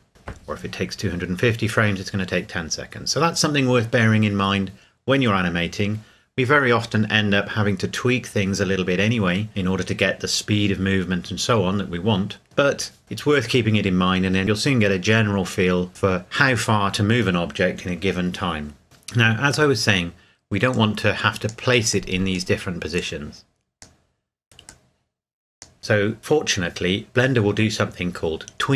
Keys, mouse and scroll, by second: 20.7 click.